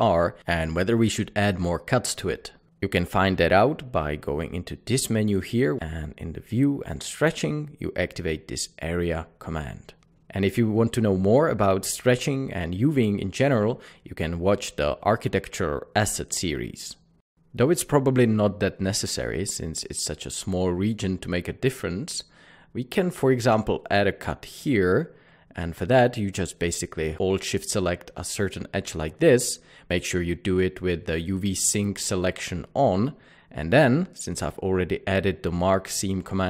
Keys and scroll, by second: 22.8 typing, 26.1 ctrl+2.